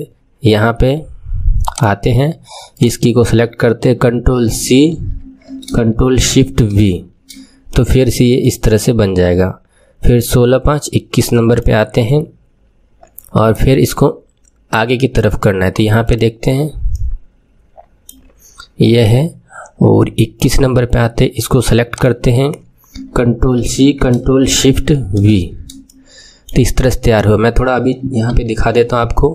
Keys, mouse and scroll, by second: 1.7 click, 2.7 click, 4.5 ctrl+c, 6.6 ctrl+shift+v, 7.6-10.6 middle drag, 11.5-14.5 drag, 16.0 click, 16.9 middle click, 20.3 click, 21.9 click, 23.5 ctrl+c, 25.1 ctrl+shift+v, 25.8-28.2 middle drag, 28.2 KP_3.